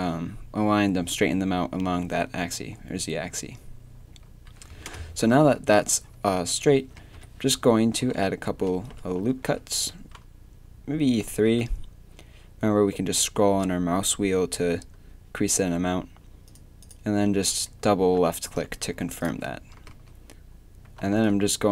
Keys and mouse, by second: 4.9-7.1 typing, 8.5 ctrl+e, 9.3 ctrl+r, 18.0 a, 19.9 z, 20.9 a, 21.2 b.